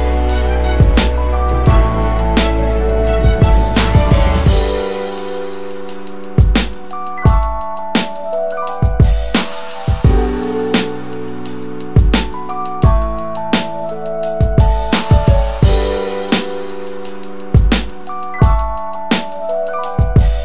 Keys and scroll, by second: 18.2 Delete.